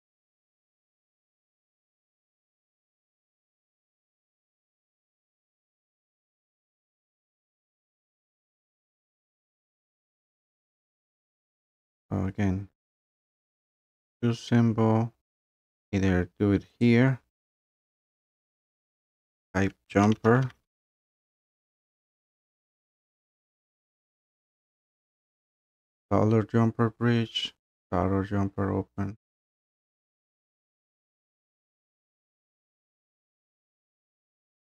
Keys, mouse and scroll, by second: 13.3 click, 14.2 scroll, 15.5 scroll, 16.8 click, 19.6-20.9 typing, 29.5 click, 30.3 click, 30.7 click, 31.7 click, 31.9 click, 33.1-34.1 typing.